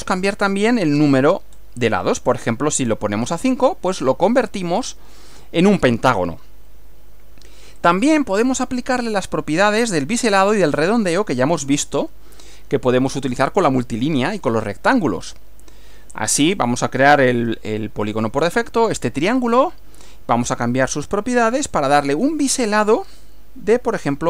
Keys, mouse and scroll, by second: 1.0 scroll up 1, 1.6 scroll up 1, 4.1 click, 4.8 click, 7.8 click, 9.7 click, 11.8 click, 13.2-14.6 middle drag, 16.6 scroll up 1, 17.5-18.4 shift+middle drag, 19.4 click, 21.8 click.